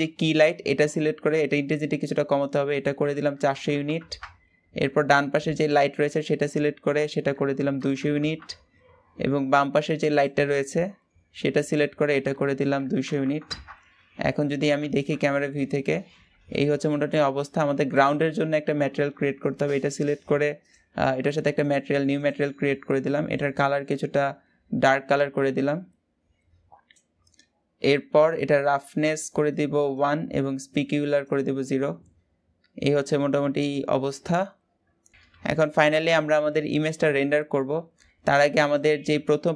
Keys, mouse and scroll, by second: 1.2 click, 2.1-3.6 drag, 3.6 KP_0, 5.4 click, 6.6-7.8 drag, 7.8 KP_0, 9.8 click, 11.4-13.0 drag, 13.0 KP_0, 14.7 KP_0, 15.8-16.3 scroll up 1, 16.3-17.6 shift+middle drag, 17.6 click, 20.4 click, 21.3 click, 21.9-23.1 drag, 29.2-32.2 drag, 32.2 scroll up 1, 36.7 click.